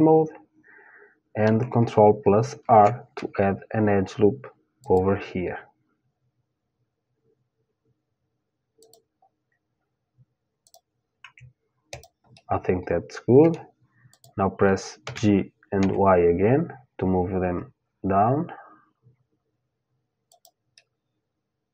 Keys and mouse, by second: 2.2 ctrl+r, 10.2-13.5 drag, 10.8 Tab, 11.9-12.9 middle drag, 13.5 middle click, 13.7-15.7 drag, 14.6 g, 20.4-21.7 middle drag.